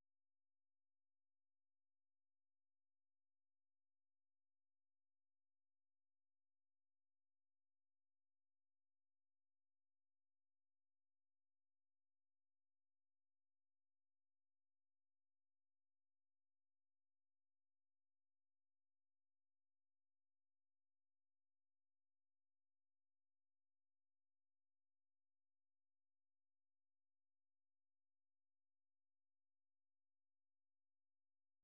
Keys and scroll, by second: 0.6 Up, 1.6 Left, 2.1 Left, 2.2-2.7 Left, 3.8 alt+Tab, 4.6 ctrl+t, 4.8-8.3 typing, 6.0 ctrl+a, 11.4-12.1 typing, 13.1 Left, 13.6 Left, 13.6 Left, 14.1 Right, 14.5 Left, 14.8-15.2 typing, 16.0 Return, 17.8 Up, 18.1 Left, 18.6-19.5 Left, 20.1-21.7 typing, 22.8 Up, 23.0 Up, 24.1 Up, 24.4-26.1 typing, 26.1-27.3 Left, 27.8 Left, 28.6 Right, 29.1-29.5 typing, 30.0 Return.